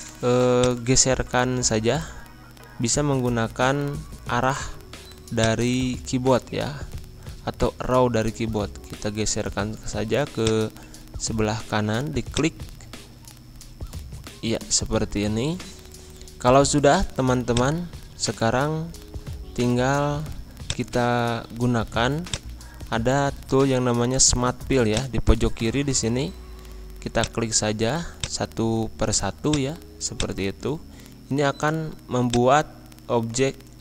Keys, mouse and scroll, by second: 0.5-2.4 drag, 2.4-2.7 scroll up 1, 3.1-5.0 scroll down 1, 5.3-8.7 drag, 8.7-9.3 scroll down 1, 10.3 click, 10.8 scroll up 1, 12.3 click, 13.5 Right, 15.3 Left, 15.9 scroll down 1, 16.9 scroll up 1, 17.5 click, 18.1 scroll up 1, 20.6 click, 21.8 p, 22.3 click, 24.8 click, 25.7-26.1 scroll up 1, 27.1 click, 30.6-32.2 scroll down 1, 32.2 click.